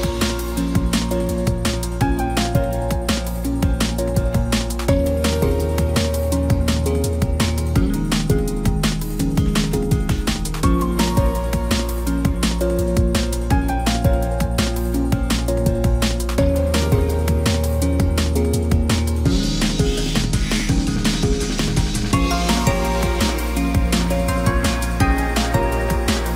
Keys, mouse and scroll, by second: 18.5 ctrl+=, 20.5 ctrl+j, 23.4 ctrl+t.